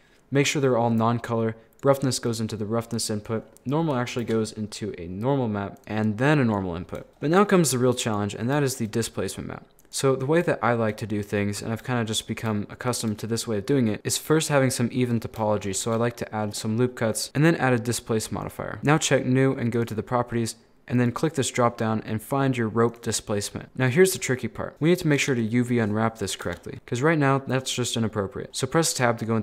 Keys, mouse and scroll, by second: 3.5 scroll down 1, 3.6 middle click, 4.2 shift+a, 5.8 click, 5.9 click, 7.0 shift+middle click, 7.3 scroll up 3, 7.5 shift+middle click, 8.1 right click, 8.4 scroll up 4, 8.7-9.8 shift+middle drag, 9.8 click, 10.6-12.3 shift+middle drag, 12.3-12.6 scroll down 1, 12.6-15.9 shift+middle drag, 15.9 ctrl+r, 17.3-18.9 drag, 19.7 click, 21.0-23.6 drag, 23.6 shift+middle click, 24.0 scroll down 5, 24.2 shift+middle click, 24.8 z, 26.5 Tab, 26.7 scroll up 7, 27.0 scroll down 6, 27.3-27.9 scroll up 6, 27.9-28.5 scroll down 12, 28.5 scroll up 6, 28.5 shift+middle click, 29.1-29.4 scroll down 1.